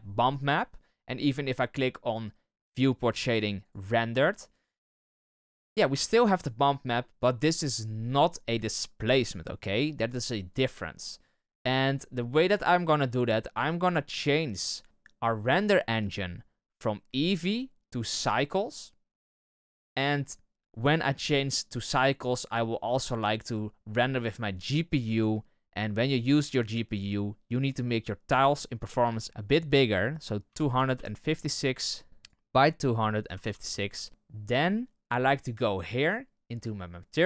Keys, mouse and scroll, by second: 12.3-14.6 drag, 18.2-32.2 drag, 33.8-37.2 drag.